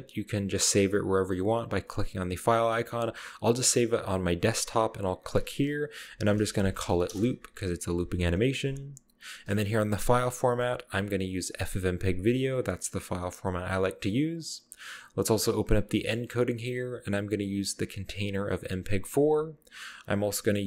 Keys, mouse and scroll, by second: 3.6 click, 4.2 middle click, 5.0 middle click, 6.2-6.7 typing, 7.1 Return, 9.8 click, 11.5 drag, 12.6 click, 15.7 click, 16.4-16.9 scroll down 2.